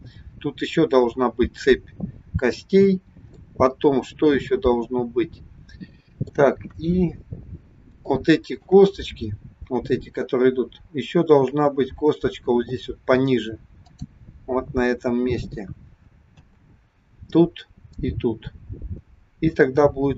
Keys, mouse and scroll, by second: 2.9-3.4 scroll down 1, 3.4 middle click, 6.8 KP_1, 7.7 scroll up 2, 8.0 shift+middle click, 11.3-11.7 scroll down 2, 13.8 click, 16.3 a.